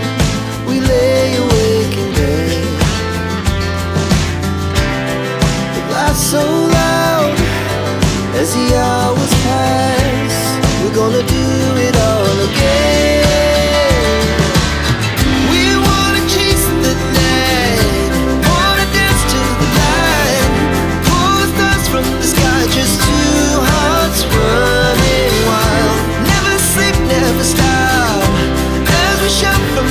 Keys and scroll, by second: 0.1 space, 5.1 KP_3, 5.3 KP_0, 5.3 Return, 7.9 Escape, 8.3 t, 8.4 space, 13.3 Delete, 16.0 Delete, 17.8-18.5 typing, 20.3 KP_1, 20.6 KP_Decimal, 20.9 KP_2, 21.3 Return, 21.9 space, 28.4 r, 28.6 space.